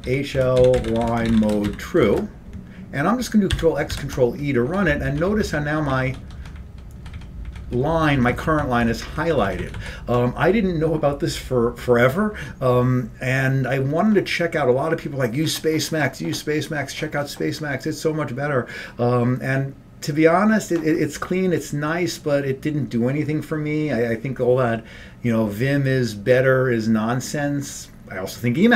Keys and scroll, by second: 0.0-2.7 typing, 3.6 ctrl+x, 4.0 ctrl+e, 4.8 Up, 5.0 Up, 5.1 Up, 5.3 Up, 5.4 Up, 5.6 Up, 5.8 Up, 6.2 Up, 6.4 Up, 6.8 Up, 7.1 Up, 7.3 Up, 7.8 Up, 7.8 Up, 8.1-10.1 typing.